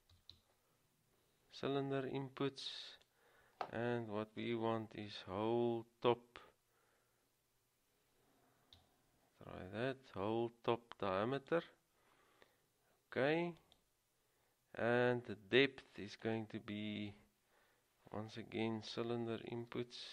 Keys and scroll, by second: 2.7-3.5 typing, 5.2 typing, 11.5 typing, 19.6 typing.